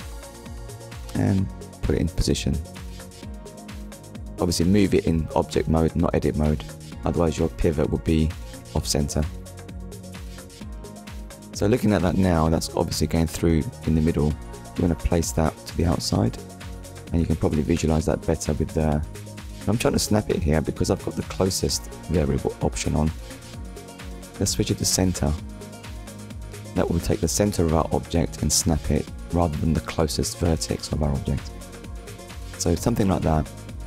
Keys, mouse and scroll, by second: 0.0 Tab, 0.9 click, 3.3 shift+middle click, 5.1 click, 5.3 middle click, 6.1 z, 6.5 click, 6.9 middle click, 7.7 z, 8.1 click, 8.8 click, 9.5 middle click, 11.2 KP_3, 13.4 click, 17.3 ctrl+click, 21.9 click, 26.0 click, 27.6 scroll up 1, 28.6 click, 29.2 ctrl+click, 33.5 scroll up 1.